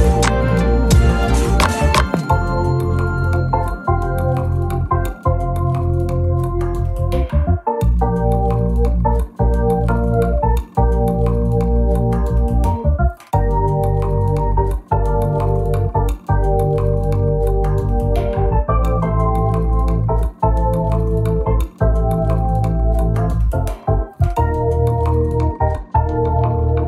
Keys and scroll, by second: 0.4 Delete, 0.8 space, 2.1-2.7 typing, 3.6 shift+F6, 8.3 F1, 10.0 shift+F6, 25.4 F1, 26.4 Page_Down.